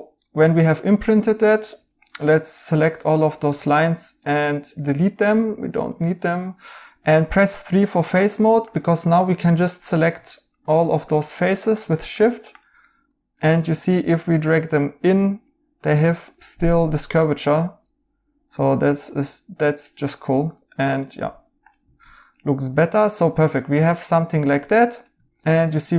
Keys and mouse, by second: 1.3 2, 4.7 right click, 6.0 x, 6.2 right click, 6.9 x, 9.4 right click, 11.2 right click, 12.8 right click, 15.8 right click, 18.5 right click, 21.2 2, 22.0 right click, 23.8 right click, 25.1 Tab.